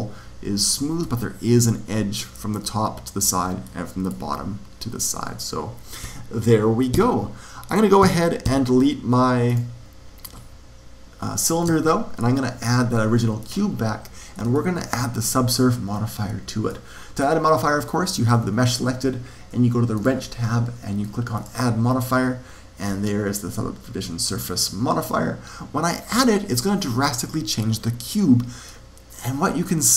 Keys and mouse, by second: 0.6-2.6 middle drag, 3.5-7.2 middle drag, 6.9 z, 7.9 z, 8.4 x, 11.6 shift+a, 14.5-16.5 middle drag, 16.6-18.3 drag, 19.9-23.1 drag, 28.6-29.9 middle drag.